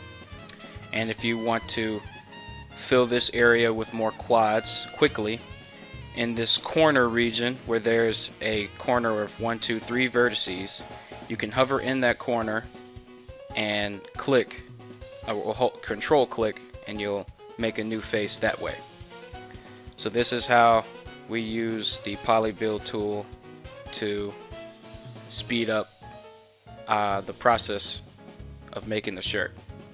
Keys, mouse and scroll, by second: 2.1-4.6 scroll up 1, 4.6-5.2 scroll up 1, 5.2-9.9 scroll up 1, 9.9-10.9 scroll up 1, 10.9-13.1 scroll up 1, 13.1-15.2 scroll up 1, 15.2-17.7 scroll up 1, 17.7-18.6 scroll up 1, 18.6-19.8 scroll up 1, 19.8-20.6 scroll up 1, 20.6-23.0 scroll up 1, 23.0 ctrl+z, 27.2-29.9 drag.